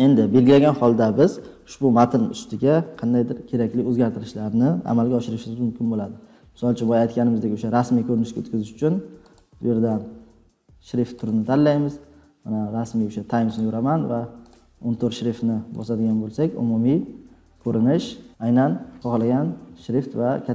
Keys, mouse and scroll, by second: 1.5-1.8 scroll down 2, 9.3 click, 11.2 click, 12.0 click, 13.5 click, 13.5 middle click, 14.5 middle click, 14.7 click, 15.7 click, 16.9 scroll, 16.9 scroll down 3, 17.3-18.0 scroll.